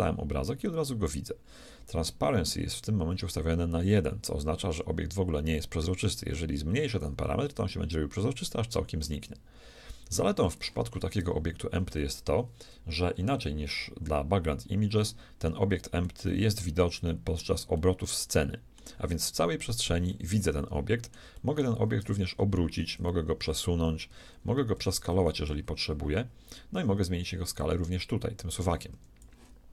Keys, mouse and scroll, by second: 0.2-5.4 middle drag, 5.8-7.7 drag, 16.0-23.0 middle drag, 22.0 r, 24.2 g, 25.3 s, 27.6-29.6 drag.